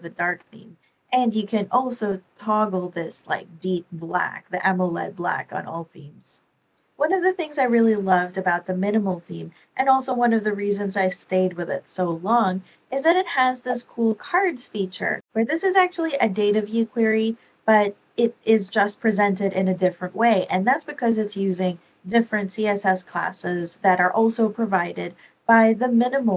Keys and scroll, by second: 15.4 Page_Down, 15.6 Page_Down, 17.0 Page_Up, 18.5 Page_Up.